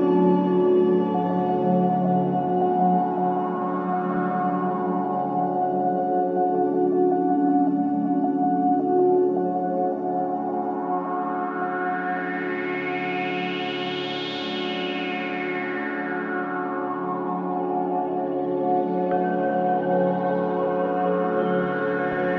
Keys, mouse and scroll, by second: 0.0-2.3 middle drag, 2.3-2.9 drag, 5.6 e, 9.6-11.3 drag, 11.3-11.7 scroll up 2, 12.2-13.6 middle drag, 14.3-15.5 drag, 19.2 e.